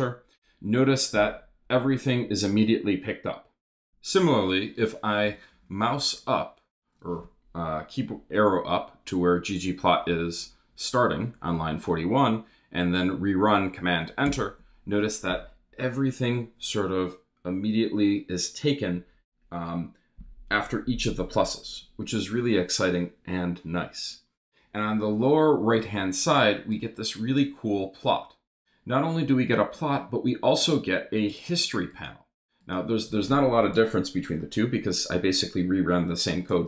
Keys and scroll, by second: 5.2 Up, 5.8 Up, 14.2 super+Return.